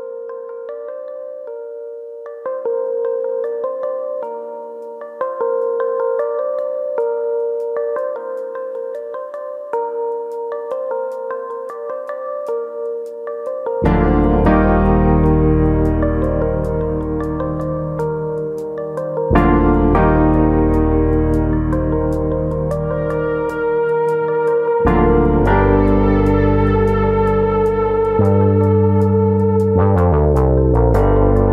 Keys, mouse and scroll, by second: 0.0 click, 0.0 middle click, 0.4 g, 1.2 click, 1.6 click, 1.8 g, 2.5 click, 2.6 middle click, 3.0 click, 3.2 g, 4.0 click, 4.2 middle click, 4.7 middle click, 5.4 click, 6.0 middle click, 6.5 middle click, 7.1 g, 9.0 right click, 10.7 click, 10.7 g, 10.9 middle click, 11.5 middle click, 12.9 click, 13.1 middle click, 13.7 click, 15.1 shift+click, 16.0 click, 16.9-17.3 scroll down 4, 17.4 middle click, 17.9 middle click, 18.1 scroll down 1, 18.3 middle click, 18.8 shift+middle click, 19.0 shift+middle click, 19.3 Tab, 19.4-19.9 scroll down 5, 19.9 middle click, 20.8 scroll up 2, 21.1 middle click, 23.2 scroll down 2, 23.7 middle click, 28.3 click, 28.8 Tab, 29.2-29.9 scroll up 3, 29.6 shift+middle click, 29.9 middle click, 31.1 KP_1.